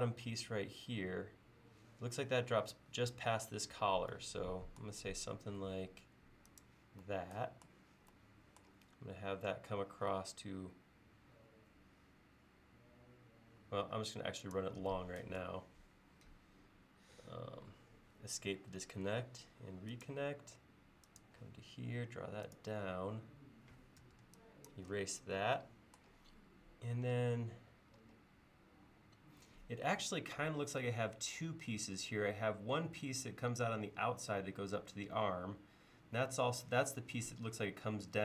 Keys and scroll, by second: 18.6 Escape, 19.1 Escape, 24.1 e.